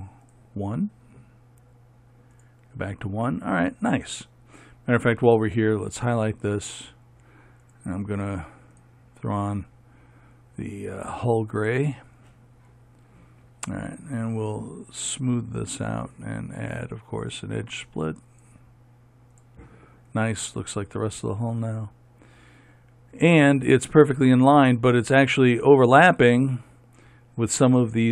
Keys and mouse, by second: 5.8-15.6 right drag, 15.6-22.8 drag, 22.8-28.1 middle drag.